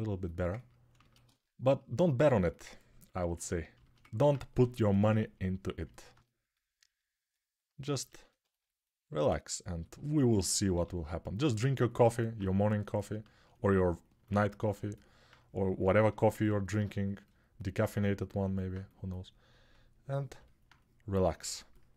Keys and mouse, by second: 0.4-21.9 ctrl+alt+shift+drag, 4.4 6, 10.5 g.